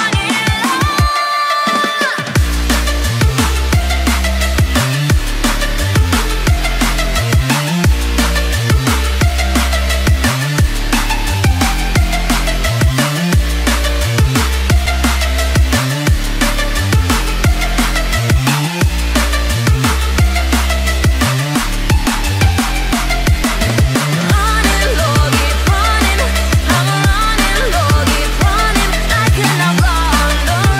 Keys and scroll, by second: 25.0 ctrl+alt+z.